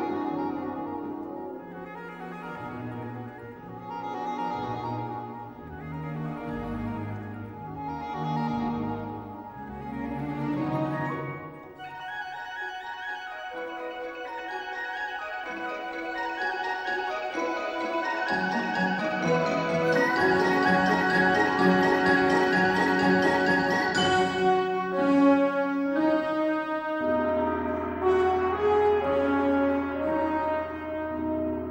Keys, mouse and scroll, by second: 2.0-10.0 middle drag, 10.0 click, 11.4 x, 12.6 click, 19.4-22.0 middle drag, 22.0 click, 25.3 click, 28.9-31.7 middle drag.